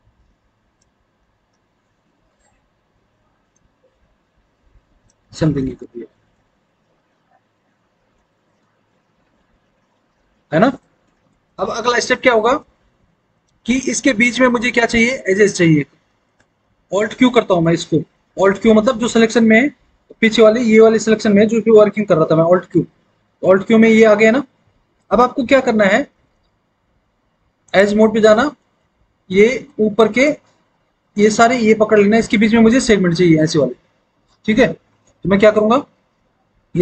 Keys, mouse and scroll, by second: 5.3 alt+w, 5.7 alt+w, 12.5 alt+w, 13.9 alt+w, 14.7 alt+w, 16.3 alt+w, 22.6 alt+q.